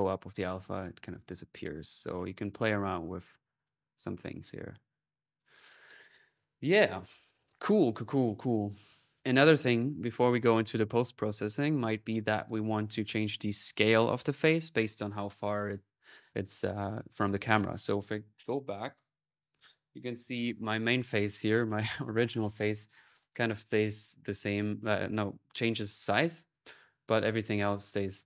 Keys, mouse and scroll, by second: 4.4-5.8 drag, 5.8 click, 9.0 click, 12.3 click, 23.7 middle click.